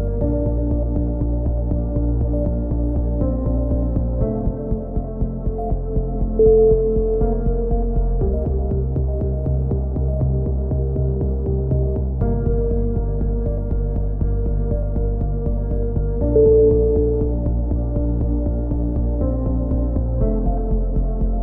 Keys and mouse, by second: 0.0 KP_7, 0.2 z, 0.4 click, 1.0 right click, 1.5 e, 1.9 click, 2.9 right click, 3.1 click, 4.4 right click, 5.0 click, 5.5 click, 6.7-7.7 right drag, 6.9 KP_3, 8.1 click, 8.1 right click, 9.3 c, 9.7 right click, 10.1 click, 11.1 z, 11.7 z, 13.0 click, 13.3 KP_7, 13.5 click, 14.0 right click, 14.5 e, 15.0 click, 15.9 ctrl+z, 16.4 click, 16.5 a, 16.7 right click, 17.0 x, 19.6 click, 19.6 right click, 20.3 click, 20.5 ctrl+z, 20.9 e, 21.0 click.